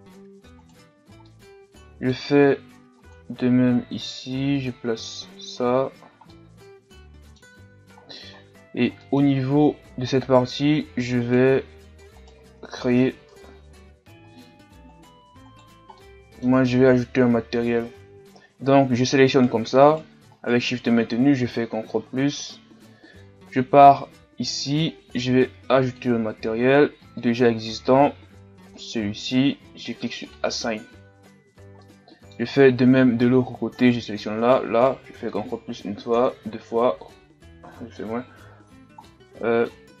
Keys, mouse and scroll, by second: 0.2-0.6 scroll up 1, 0.6 right click, 1.3-4.7 middle drag, 4.7 click, 5.6 a, 5.9-6.3 scroll down 1, 6.3-7.5 middle drag, 7.5-8.0 scroll up 2, 8.0-8.4 scroll down 2, 8.4 scroll up 1, 8.7 Tab, 9.0 middle click, 9.4-10.2 scroll up 2, 10.2-11.2 scroll down 1, 11.2 scroll down 1, 11.3-14.5 right drag, 14.5 ctrl+Tab, 15.0-16.0 right drag, 16.0-18.6 middle drag, 18.6-19.1 shift+scroll down 1, 19.4-21.4 right drag, 21.4 ctrl+KP_Add, 22.0 ctrl+KP_Add, 25.9-31.5 drag, 31.5-31.8 scroll down 2, 31.8 middle click, 32.7-33.8 scroll up 3, 33.8-35.1 right drag, 35.2 ctrl+KP_Add, 36.2 ctrl+KP_Add, 37.7 ctrl+KP_Subtract, 39.1-40.0 middle drag.